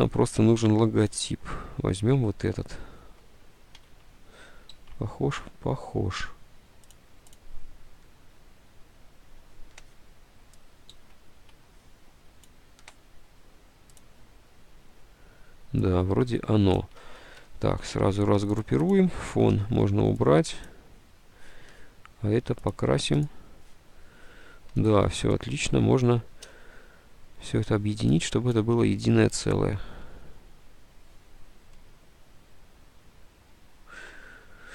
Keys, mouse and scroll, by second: 4.0 alt+Tab, 5.0 alt+Tab, 11.1 alt+Tab, 17.9 ctrl+u, 19.8 Delete, 26.5 d, 30.3 F10, 33.6 F10, 34.1 space, 34.2 F10.